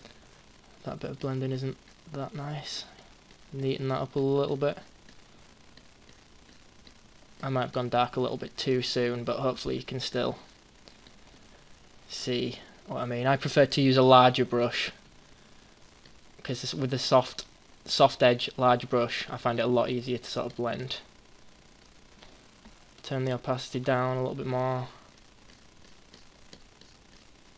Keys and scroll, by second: 13.7 ].